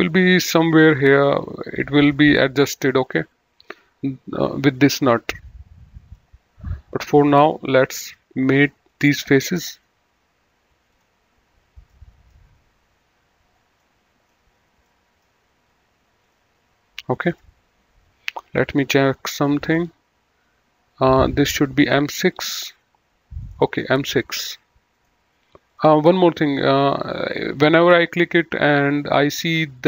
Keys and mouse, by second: 2.8 middle click, 4.7 click, 7.2 click, 7.7 middle click, 10.9 click, 11.9 middle click, 13.8 middle click, 16.2 click, 18.5 click, 21.1 middle click, 21.7 click, 23.6 right click, 24.2 click, 25.0 right click, 25.7 click, 27.2 click.